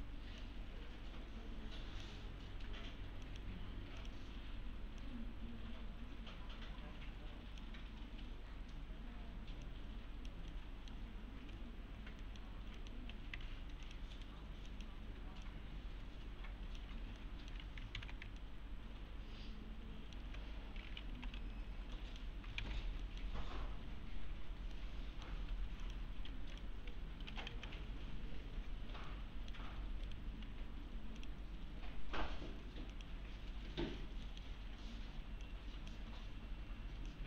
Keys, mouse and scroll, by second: 2.4-2.9 scroll up 1, 3.3 click, 8.0-8.6 scroll down 1, 8.6-9.6 scroll up 1, 9.9-11.1 click, 10.5 middle click, 12.2 middle click, 13.4 alt+1, 13.8 click, 14.1 right click, 14.7 click, 17.0 scroll down 1, 17.2-17.8 alt+middle click, 17.6 1, 18.0 alt+x, 18.4-20.3 alt+middle click, 20.9-21.9 typing, 22.0 middle click, 22.6 alt+x, 23.0 middle click, 23.4-24.6 scroll up 1, 24.7-25.4 alt+middle click, 25.5-28.0 typing, 25.8 click, 26.5 click, 27.8-28.2 scroll down 1, 29.1-29.7 middle click, 29.6 scroll up 1, 30.1 right click, 31.2 click, 34.3 middle click, 34.6 1, 34.8-35.4 scroll down 1, 35.4-36.1 click, 36.1-37.1 scroll up 1, 37.1-37.2 click.